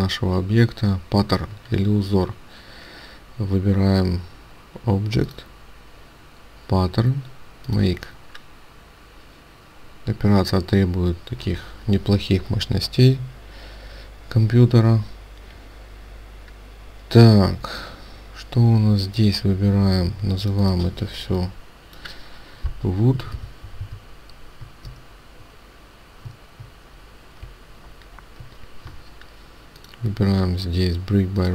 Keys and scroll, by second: 25.0 alt+shift+w, 25.0 alt+shift+o, 29.3 Delete.